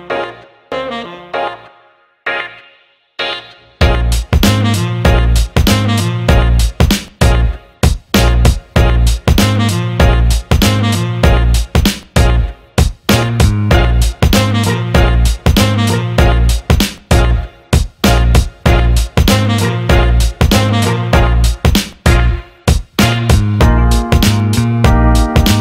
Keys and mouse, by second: 4.2 Tab, 5.4-11.3 middle drag, 11.3 r, 14.9-16.5 ctrl+middle drag, 16.5 KP_1, 17.6-18.7 ctrl+middle drag, 18.7 g, 23.7 r.